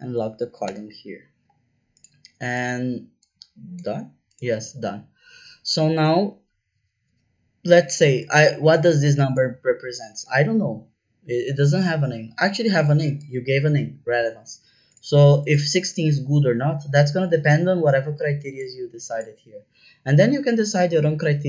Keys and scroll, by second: 0.6 Return.